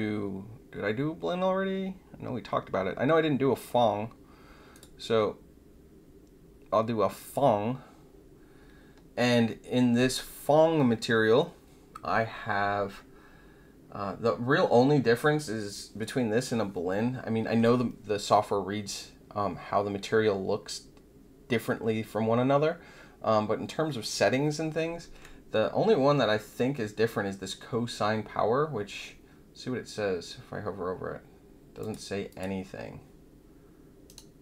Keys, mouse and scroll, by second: 4.7 click, 7.1 click, 31.8 click, 32.2 click, 34.0 right click.